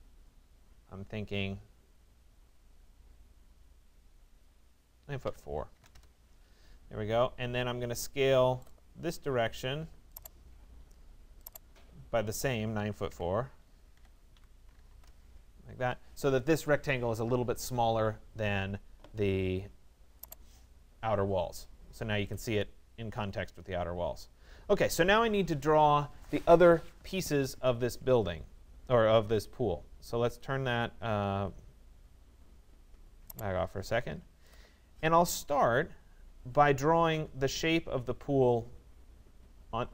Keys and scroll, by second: 4.9 4, 6.0 Return, 12.6 9, 14.9 Return.